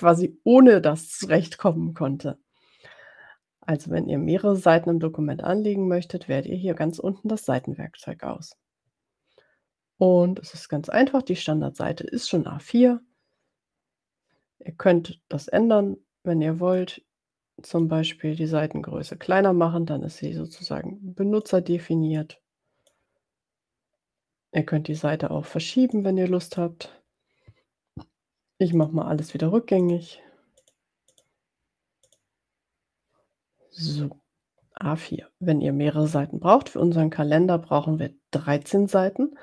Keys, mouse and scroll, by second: 7.4 click, 16.8-17.9 drag, 20.7-21.7 drag, 22.1 click, 25.0 click, 26.0 click, 29.0 click, 29.3 click, 30.0 click, 30.5 click, 31.1 click, 32.1 click.